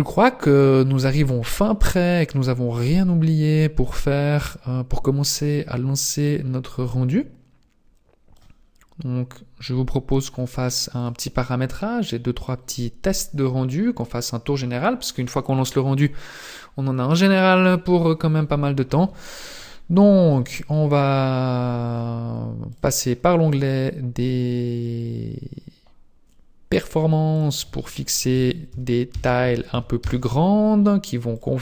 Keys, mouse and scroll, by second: 0.5 click, 1.7-2.6 scroll down 3, 5.3 click, 10.9 click, 12.5 click, 19.9-21.9 scroll down 10, 21.9-22.7 scroll down 5, 22.7 click, 23.0-25.3 scroll down 4, 27.3 click, 31.3 click.